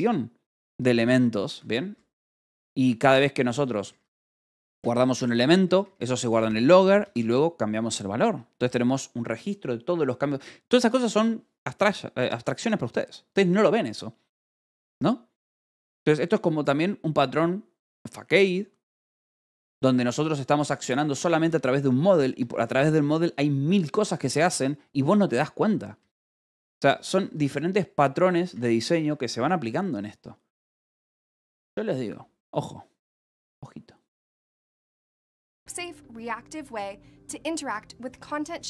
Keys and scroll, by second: 2.0 ctrl+g, 2.1 Escape, 2.5-4.4 typing, 5.0 Escape, 5.5 k, 6.3 Escape, 6.7 j, 7.5 shift+v, 8.1 Escape, 21.1 k, 21.9 shift+v, 22.3 Escape, 24.6-25.8 typing, 26.8 j, 28.4 k.